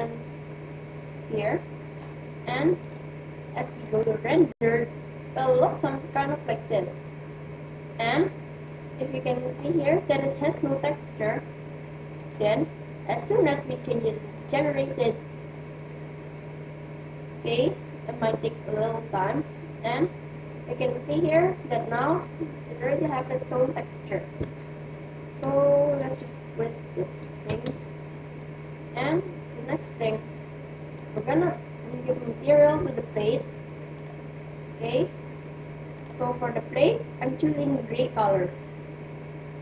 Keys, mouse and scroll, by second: 0.0-1.9 drag, 2.8-4.6 drag, 11.4-13.8 drag, 27.2 shift+z, 28.4 middle click, 30.6-32.2 right drag, 33.5-34.9 drag, 36.0-37.2 drag.